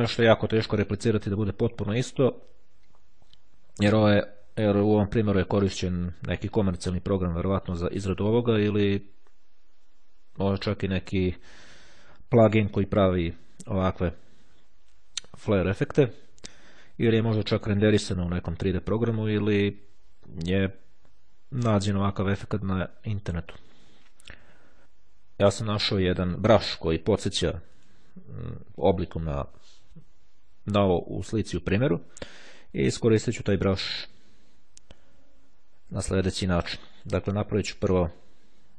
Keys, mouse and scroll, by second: 27.7 click, 36.9 click, 38.1 click.